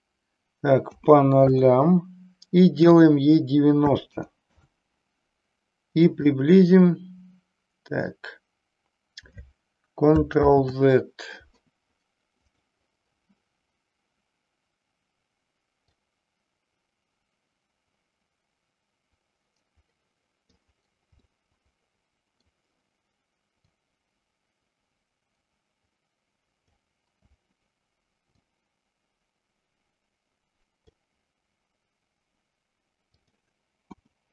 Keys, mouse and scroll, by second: 2.9-4.9 drag, 6.3-8.3 drag, 10.4 ctrl+z, 15.8-20.5 drag, 21.3-22.4 middle drag, 23.5-26.7 drag, 28.3-30.9 drag, 33.1-34.3 drag.